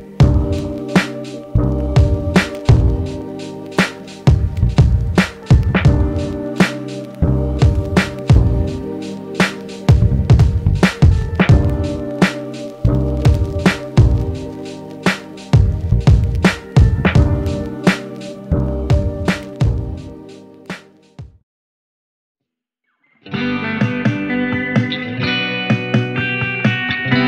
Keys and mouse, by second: 5.5 g, 5.7 shift+middle click, 6.0-16.5 alt+shift+drag, 9.9 ctrl+z, 10.1 ctrl+z, 12.3 ctrl+z, 14.3 ctrl+z, 15.6 ctrl+z, 16.6-23.6 ctrl+drag, 16.9 ctrl+z, 21.2 ctrl+Tab, 23.6-26.7 ctrl+middle drag, 23.9 ctrl+Tab.